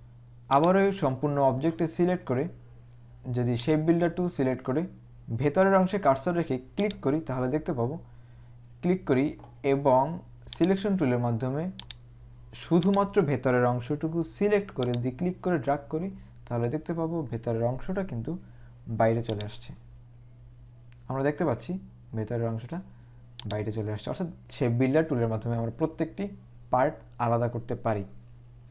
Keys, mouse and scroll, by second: 0.6 click, 3.8 click, 6.9 click, 10.7 click, 12.0 click, 14.9 click, 19.4 click.